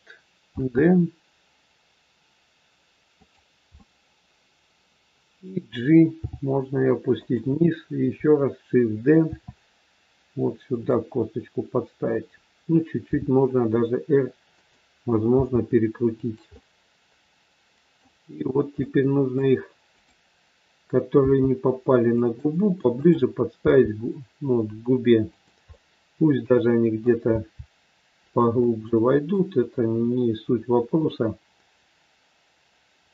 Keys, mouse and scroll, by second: 0.4 shift+d, 3.8 middle click, 6.2 g, 9.2 shift+d, 13.0 r, 15.3 g, 16.5 middle click, 18.7 middle click, 19.8 click, 21.2 g, 22.9 click, 23.6 g, 25.7 middle click, 27.3 g, 28.6 middle click, 28.6 scroll up 1, 29.7 middle click.